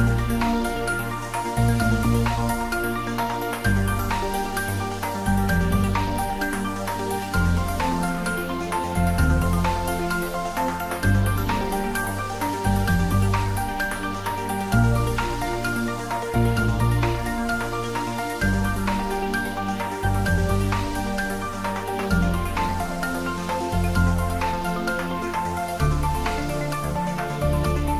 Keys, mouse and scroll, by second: 2.5-2.9 scroll up 1, 2.9 middle click, 3.3 Tab, 3.8-4.7 scroll up 1, 4.7 click, 5.2 Tab, 5.7-6.1 scroll down 1, 6.1-8.4 middle drag, 8.4 ctrl+3, 9.0-9.8 scroll up 1, 9.8 middle click, 10.9 ctrl+r, 12.5 middle click, 12.9 middle click, 13.0 Tab, 14.4 ctrl+r, 14.8 click, 17.1-18.5 middle drag, 18.5 ctrl+r, 18.9 click, 20.4 middle click, 21.3 middle click, 22.5 ctrl+r, 23.2 click, 24.5-26.1 middle drag, 26.1 ctrl+r, 26.4 click.